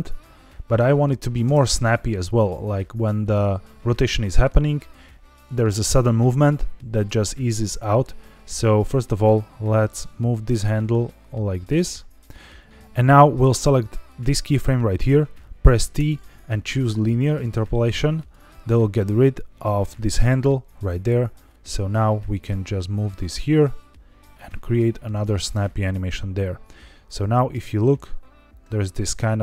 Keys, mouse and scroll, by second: 1.4 space, 2.0-4.8 drag, 9.1 click, 9.9 click, 12.7 shift+middle click, 12.7-13.3 scroll up 2, 14.0 click, 15.9 t, 18.1 click, 21.4 click, 27.0 click, 27.4 space.